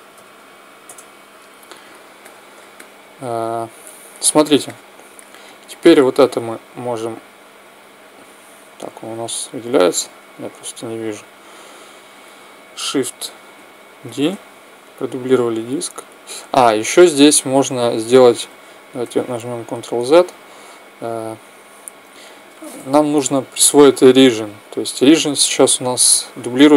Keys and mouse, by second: 2.0-6.3 middle drag, 5.4-8.3 right drag, 8.5 z, 9.1 z, 11.2-13.0 drag, 13.8 shift+d, 15.6-17.0 drag, 19.2 ctrl+z, 20.4-22.1 right drag, 23.9 t.